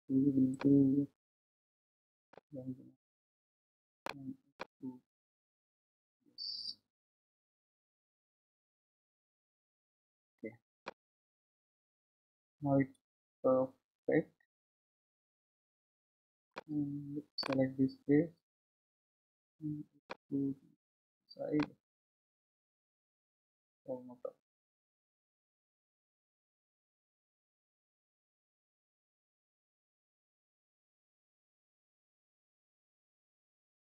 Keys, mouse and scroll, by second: 0.5-4.8 drag, 10.8-13.9 middle drag, 13.9-15.3 scroll up 1, 17.4 click, 20.0-21.9 drag.